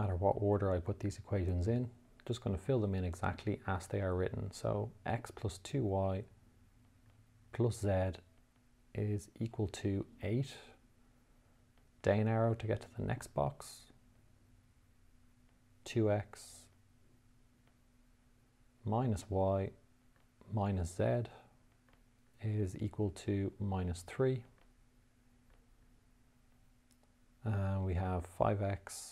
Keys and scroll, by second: 1.9 2, 3.4 y, 7.4 z, 8.9 =, 10.5 8, 12.3 Down, 14.6 2, 15.8 x, 18.0 -, 19.3 y, 20.5 -, 22.2 z, 23.5 =, 24.9 -, 25.8 3, 26.8 Down, 28.9 5.